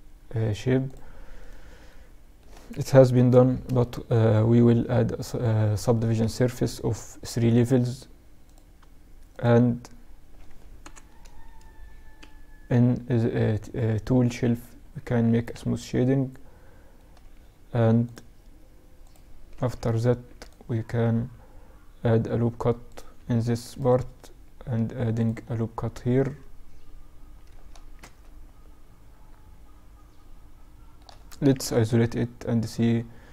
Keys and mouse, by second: 0.4-2.2 right drag, 2.2 ctrl+2, 2.3-5.7 middle drag, 6.2-10.2 drag, 9.8 ctrl+Up, 13.2 t, 13.5-15.6 drag, 13.8 t, 18.6 Tab, 19.1 ctrl+r, 22.5 ctrl+r, 24.6 middle click, 24.8 middle click, 25.0 middle click, 25.2 middle click, 27.0 Tab, 29.1-31.7 middle drag, 30.6 KP_Divide, 33.1 Tab.